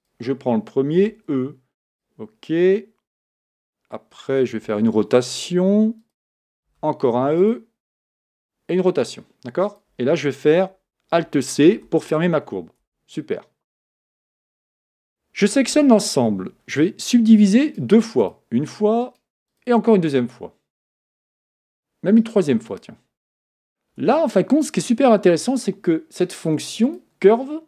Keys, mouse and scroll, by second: 0.0 click, 1.0 e, 4.7 r, 6.7 e, 8.4 r, 11.8 alt+c, 12.8 Tab, 14.0 Tab, 15.6 a, 15.8 a, 17.6-24.3 right drag, 24.3 Tab, 25.3 Tab, 25.3 Tab, 26.9-27.6 drag.